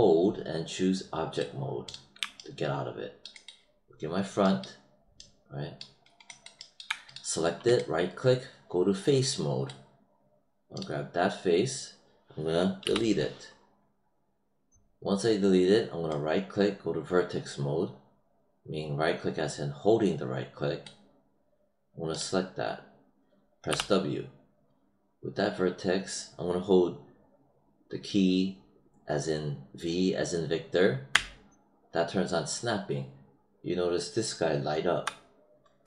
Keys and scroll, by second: 12.8 BackSpace, 23.6 w, 31.0 v.